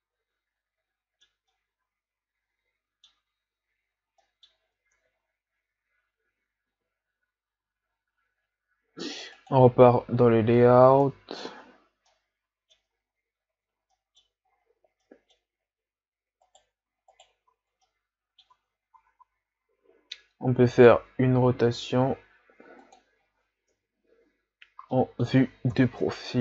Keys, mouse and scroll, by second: 5.3 ctrl+z, 6.0 ctrl+z, 6.3 ctrl+z, 6.7 ctrl+z, 7.2 ctrl+z, 7.5 ctrl+z, 9.6 click, 11.1 Tab, 11.5 a, 12.1-13.5 middle drag, 13.5-13.8 ctrl+scroll down 3, 14.0-14.5 middle drag, 14.5-14.9 scroll up 4, 15.0-15.5 middle drag, 15.5 scroll up 3, 16.5 right click, 17.1 shift+right drag, 17.9 middle click, 18.6 Tab, 19.0 a, 19.3 a, 20.7 r, 24.9 KP_3, 25.1 middle click, 25.7 KP_3.